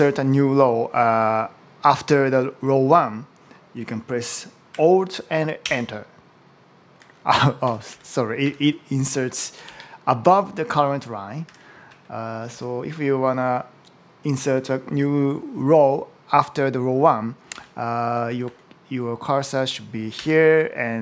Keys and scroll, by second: 5.5 alt+Return, 7.5 Up, 7.7 Down, 8.3 Left, 9.5 shift+Down, 11.3 super+x, 11.7 Right, 12.4 Down, 12.7 Right, 13.4 Right, 17.3 Up, 17.4 Left, 20.0 Down.